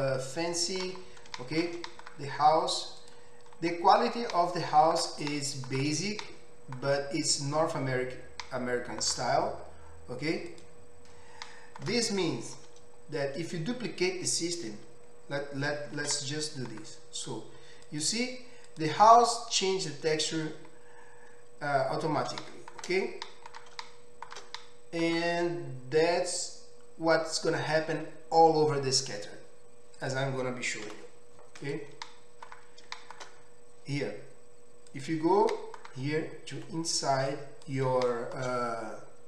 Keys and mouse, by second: 3.1-10.5 middle drag, 10.5 click, 10.7-15.1 middle drag, 16.1 shift+d, 18.7 click, 19.4-30.0 middle drag, 30.0 click, 30.2-31.7 middle drag, 31.0 Delete, 31.7 click, 31.8-34.9 middle drag, 34.9 click, 35.1-37.3 middle drag, 36.7 Tab, 37.3-39.2 drag.